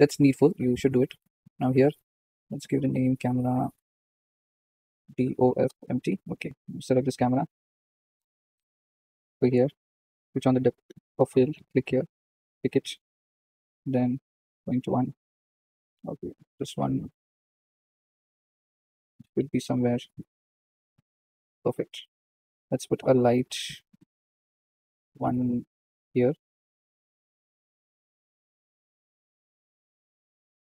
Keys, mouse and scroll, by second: 1.2 click, 1.9 click, 2.4 click, 3.0 click, 4.0-6.7 drag, 7.6-8.0 scroll up 2, 9.7 click, 12.2 click, 12.9-14.5 scroll down 7, 14.5-15.8 drag, 16.3 click, 17.2 click, 17.5 click, 18.0 click, 19.5 g, 21.7 click, 23.3 click, 23.9 KP_7, 25.0 shift+d, 27.8 g, 29.9 r.